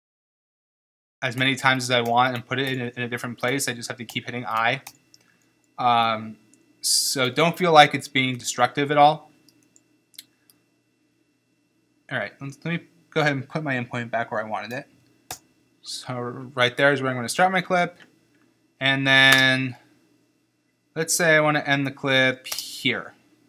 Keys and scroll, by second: 0.0 i, 15.4 i, 19.4 space, 22.6 space.